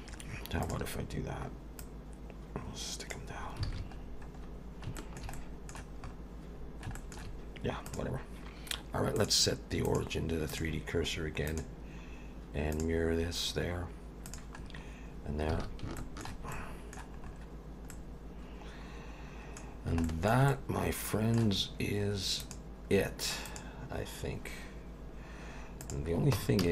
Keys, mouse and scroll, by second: 0.1-0.6 scroll up 3, 0.6 click, 1.8 click, 3.4-4.9 scroll down 9, 3.6 alt+a, 5.0 shift+middle click, 5.3 middle click, 6.0-6.9 scroll up 4, 6.9 shift+middle click, 7.8 click, 9.2 click, 11.5 click, 13.3 scroll down 2, 14.3 click, 14.6 scroll down 3, 15.5 alt+a, 16.0 shift+middle click, 16.5 middle click, 17.2 scroll up 4, 17.9 middle click, 19.7 scroll down 3, 20.0 shift+middle click, 20.5 middle click, 22.4 click, 25.0-25.4 scroll up 1, 25.8 click, 26.3 Tab, 26.6 a.